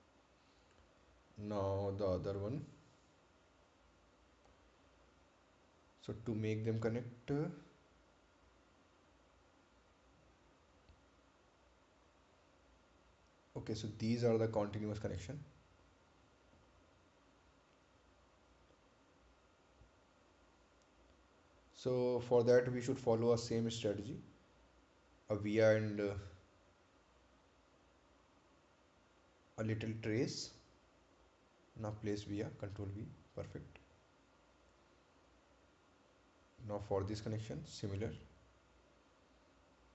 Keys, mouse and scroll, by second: 0.7 right click, 1.4 ctrl+click, 3.5 ctrl+click, 5.2-6.0 scroll down 1, 6.0-6.3 scroll up 1, 8.9-9.3 scroll up 1, 9.3 ctrl+click, 11.6 ctrl+click, 13.5 ctrl+click, 19.3 scroll up 1, 20.1-20.8 scroll down 1, 28.1 click, 31.9 right click, 32.7-33.2 scroll up 1, 34.2 ctrl+v, 34.7 click, 35.7 right click, 36.8-37.5 scroll down 1, 38.1 ctrl+click, 39.6-39.9 scroll up 1.